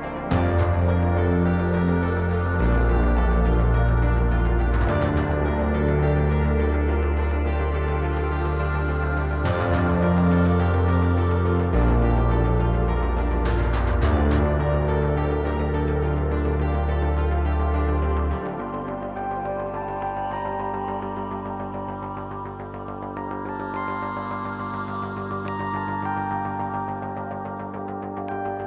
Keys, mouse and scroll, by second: 0.7 super+j, 1.7 shift+a, 5.7 click, 7.5 ctrl+shift+click, 8.8 click, 10.5-13.4 drag, 13.9 click, 16.4 click, 17.7 click, 18.7 click, 19.1 shift+a, 22.3 click, 24.2 click, 25.9-27.6 drag.